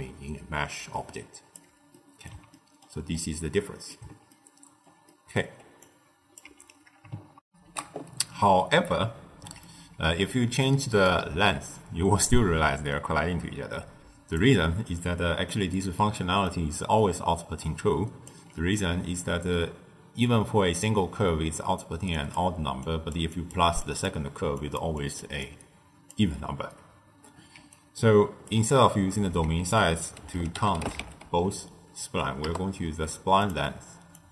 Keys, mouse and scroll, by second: 0.7 d, 1.0 right click, 1.5 d, 1.8-5.7 middle drag, 5.7 click, 6.4 x, 7.4 ctrl+alt+shift+q, 9.5-11.0 middle drag, 11.0-14.1 drag, 14.9-15.7 middle drag, 15.7-16.1 scroll up 1, 16.1-17.5 middle drag, 17.5 d, 17.6 click, 18.2 d, 18.7 middle click, 19.2-20.4 scroll up 1, 20.4-21.2 scroll up 1, 21.2-26.2 typing, 22.1 click, 22.7 click, 23.2 click, 23.7 click, 24.5 click, 24.9 click, 25.4-26.1 drag, 27.5 d, 27.7 right click, 28.5 d, 29.5 ctrl+a, 34.1 drag.